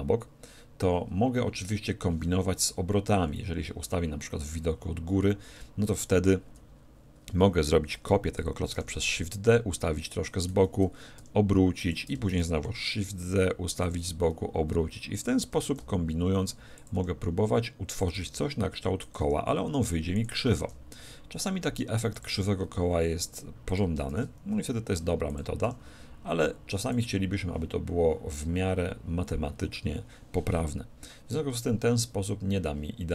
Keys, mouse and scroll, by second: 3.0 KP_7, 8.8 shift+d, 10.4-13.6 drag, 10.6 z, 11.2 r, 12.4 shift+d, 13.9-22.0 drag, 14.0 r, 15.6 shift+d, 16.9 r, 18.3 shift+d, 19.2 r, 20.6 shift+d, 22.2-28.7 drag, 22.3 r, 24.1 shift+d, 25.7 r.